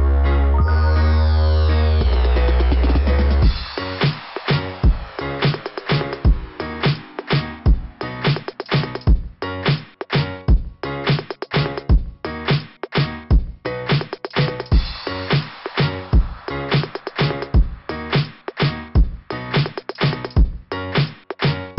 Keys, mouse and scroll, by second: 0.8 click, 1.3-2.4 typing, 1.5 click, 1.8 click, 2.4 Return, 7.6 click, 13.7-14.1 scroll up 4, 14.1 scroll down 2, 14.2 scroll up 2, 14.3 scroll down 2, 14.6 scroll up 2, 14.6 scroll down 1, 15.8 scroll down 1, 17.3 scroll up 2, 20.5 scroll up 2.